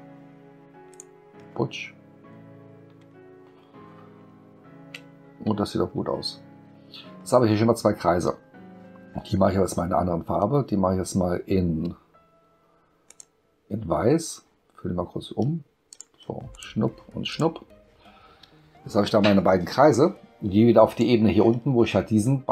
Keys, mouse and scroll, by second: 0.9 click, 2.5-4.2 middle drag, 4.4 ctrl+middle click, 5.5 space, 13.1 click, 15.9 click, 16.5 click, 17.3 click, 20.9 click.